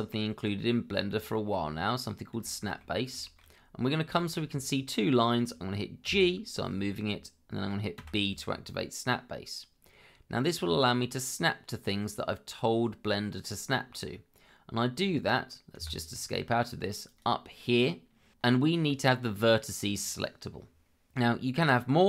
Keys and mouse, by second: 1.5 middle click, 2.4 shift+middle click, 3.2 shift+middle click, 4.1 shift+middle click, 6.0 g, 8.0 b, 15.7 Escape, 17.1-22.0 drag.